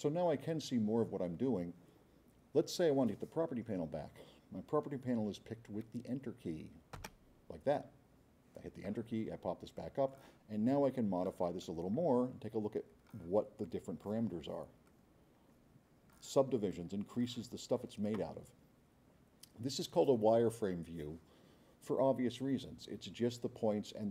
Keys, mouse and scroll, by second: 7.0 Return, 9.8-10.2 drag, 10.9 click, 11.6-13.2 drag, 13.6-14.0 drag, 14.9-16.3 drag, 16.7-17.3 drag.